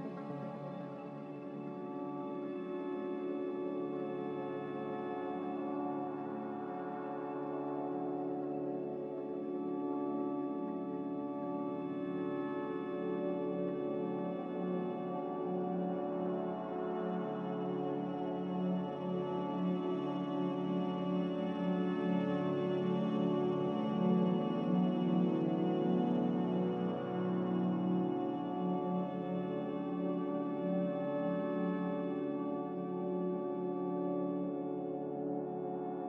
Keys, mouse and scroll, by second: 6.7 z, 12.4 z, 16.5 z, 19.1 click, 19.7 click.